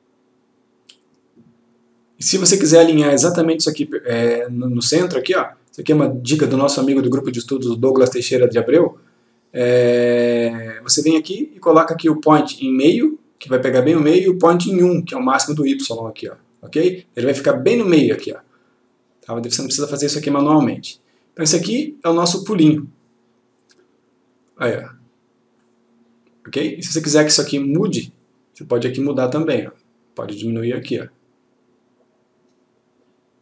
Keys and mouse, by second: 1.3-2.1 click, 4.8 click, 12.4 click, 24.9-25.8 click, 29.5-31.4 click.